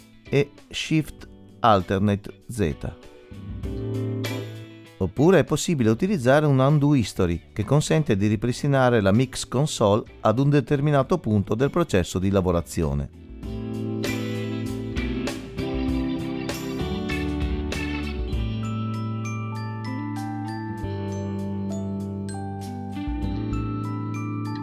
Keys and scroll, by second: 1.2 alt+shift+z.